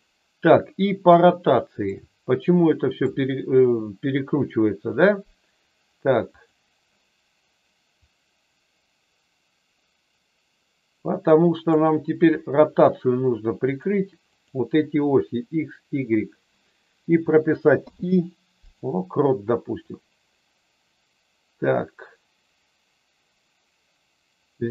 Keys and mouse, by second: 1.9-3.0 middle drag, 3.5 KP_1, 6.2 click, 8.1-11.8 drag, 14.2 click, 19.9-24.7 drag.